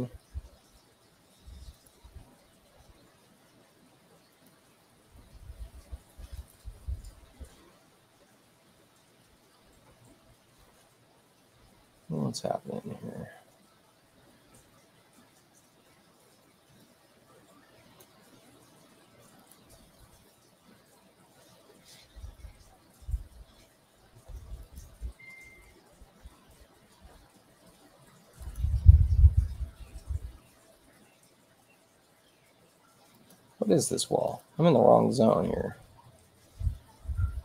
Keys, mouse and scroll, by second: 1.6 click, 4.3 click, 6.3 click, 16.7-17.9 drag, 19.3 click, 24.5 click, 28.3 click, 33.0 click, 34.2 click.